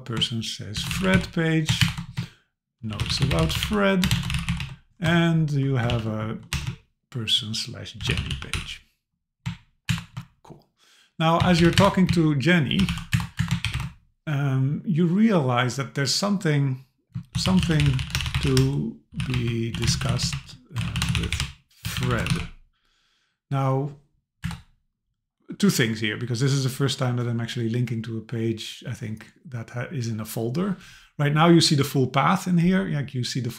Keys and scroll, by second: 1.8 shift+Return, 5.1 BackSpace, 5.9 super+k, 9.9 shift+Return, 11.8 Return, 13.1 Return, 20.8 BackSpace, 24.4 Return.